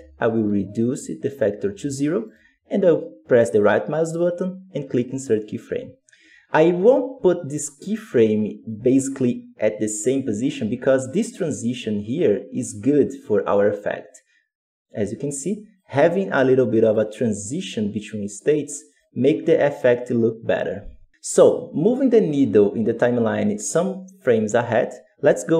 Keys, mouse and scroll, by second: 2.6-5.3 right drag, 8.6-11.7 drag, 16.8-25.5 drag.